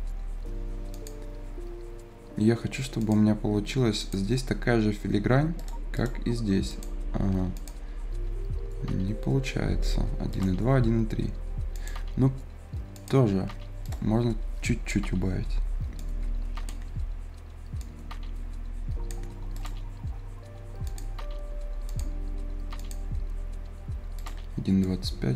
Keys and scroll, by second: 15.3 F10.